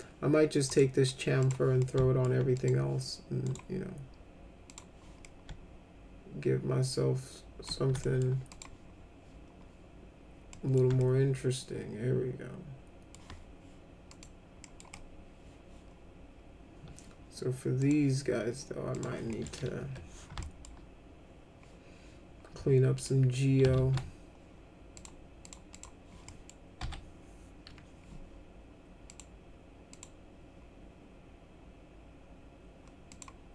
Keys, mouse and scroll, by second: 0.7 right click, 1.4 click, 1.8 alt+middle click, 2.6 click, 3.5 right click, 4.7 click, 5.3-7.7 alt+middle drag, 8.0 alt+middle click, 8.5 click, 10.5 middle click, 11.0-13.1 alt+middle drag, 14.1 click, 14.6 middle click, 17.8 click, 19.0 click, 19.3 middle click, 19.8 1, 20.4 alt+middle click, 23.0 ctrl+click, 23.7 ctrl+z, 24.9 click, 25.5 click, 25.7 click, 26.3 middle click, 26.8 F4, 29.1 click, 29.9 click, 33.1 click.